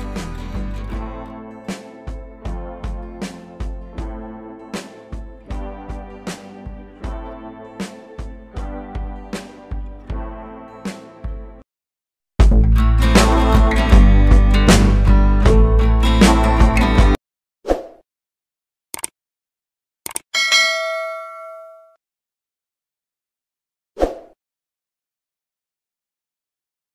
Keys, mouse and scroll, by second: 0.5 click, 2.4-4.5 shift+drag, 5.2-6.6 shift+drag, 9.6 c, 11.1 click.